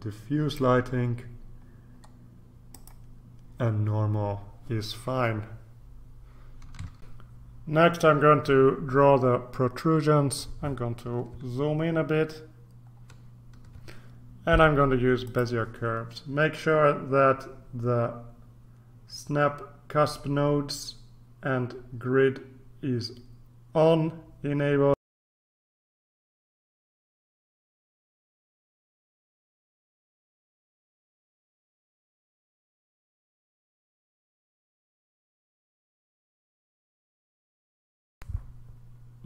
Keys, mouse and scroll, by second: 1.6-2.5 scroll down 1, 2.7 click, 7.1 ctrl+r, 12.0-12.5 ctrl+scroll up 2, 12.9-13.4 ctrl+scroll up 2, 13.4 ctrl+scroll up 1, 15.2 click, 25.3 click, 26.2 ctrl+scroll up 2, 28.1 click, 29.1 click, 29.5 click, 30.2 click, 31.2 click, 31.5 click, 32.3 click, 32.7 click, 33.3 click, 33.5 click, 33.8 click, 34.4 click, 34.7 ctrl+c, 34.8 ctrl+v, 35.0 click, 35.1 click, 35.6 click, 36.1 ctrl+c, 36.3 ctrl+v, 36.4 click.